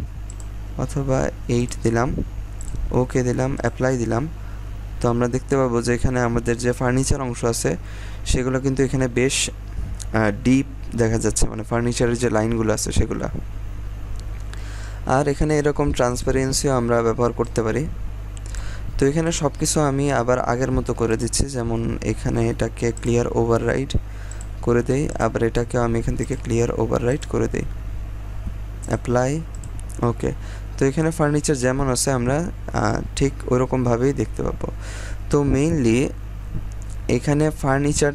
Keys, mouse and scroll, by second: 15.4-19.2 drag, 30.6 scroll down 1, 31.0 scroll up 1, 33.8 scroll down 1, 35.0-35.9 scroll up 1, 35.9-36.8 scroll down 1, 36.8-37.7 scroll up 1.